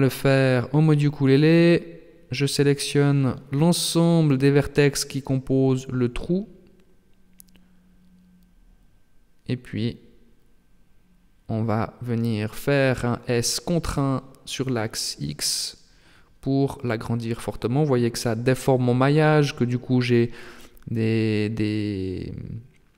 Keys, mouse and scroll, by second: 0.6 right click, 1.1 right click, 1.5 middle click, 2.5 shift+right click, 2.9 shift+right click, 4.6 middle click, 6.6 shift+right click, 7.0 shift+right click, 7.5 shift+right click, 7.9 shift+right click, 8.4 shift+right click, 8.7 shift+right click, 9.2 middle click, 10.9 middle click, 12.3 shift+right click, 13.1 shift+right click, 13.7 middle click, 15.8 s, 20.9 middle click, 22.7 alt+h.